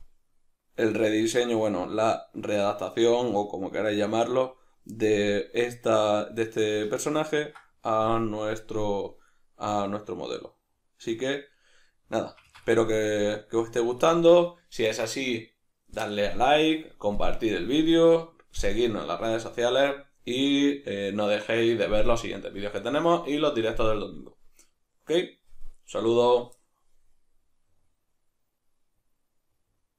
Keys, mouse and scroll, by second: 12.3 Escape, 12.8 middle click, 14.3-29.3 middle drag.